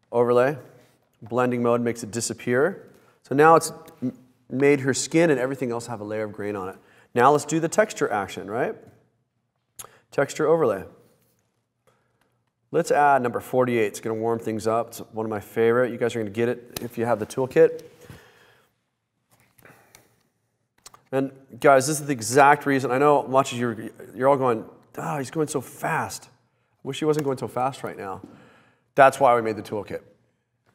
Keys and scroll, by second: 22.5 super+-, 27.3 Return, 27.8 Return.